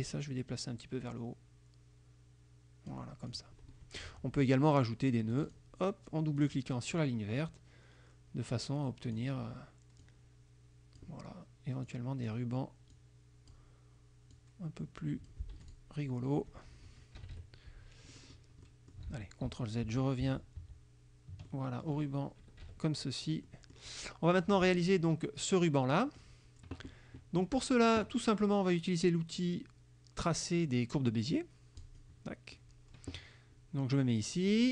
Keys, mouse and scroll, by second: 0.2-3.2 drag, 3.4 click, 5.4 click, 5.5 click, 6.5 click, 7.5-9.4 drag, 10.1 click, 11.9 click, 13.0 click, 14.4 click, 15.6 F1, 15.7 click, 17.3 KP_Subtract, 18.2 click, 18.8 click, 19.2 ctrl+z, 21.5 ctrl+click, 22.0 ctrl+scroll up 1, 22.7 KP_Subtract, 23.5 click, 24.6 click, 26.3 click, 31.9 click, 32.7 click.